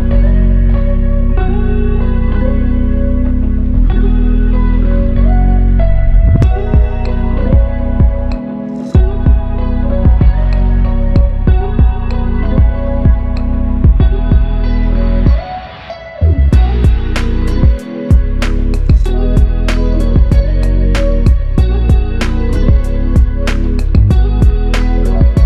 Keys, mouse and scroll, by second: 0.8 f, 6.2 double click, 11.7 double click, 19.4 double click, 25.0 alt+click.